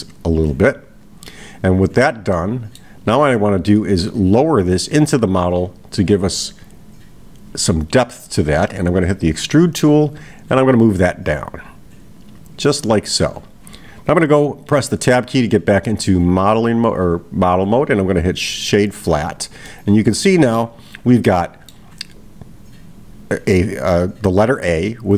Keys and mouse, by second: 0.0-1.2 drag, 2.4-2.9 middle drag, 11.0-13.3 drag, 17.1-18.9 right drag, 19.7-20.7 middle drag, 21.3-21.9 middle drag.